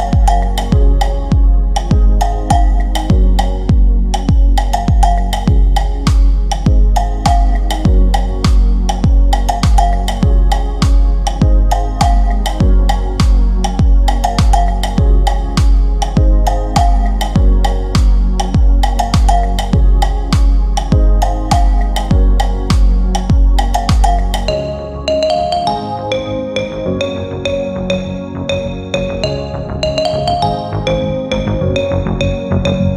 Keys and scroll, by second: 9.4 Delete, 18.4 c, 25.6 F3.